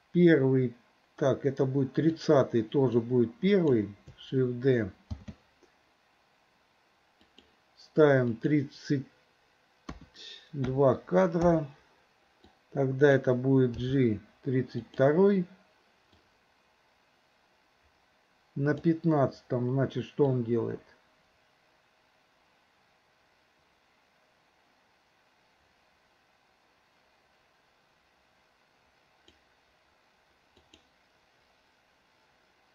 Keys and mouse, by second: 2.2 click, 3.1-3.9 drag, 5.2 shift+d, 8.4-11.5 drag, 12.5-13.3 drag, 13.9 g, 16.3-19.0 drag, 20.4-29.4 drag, 30.7 click.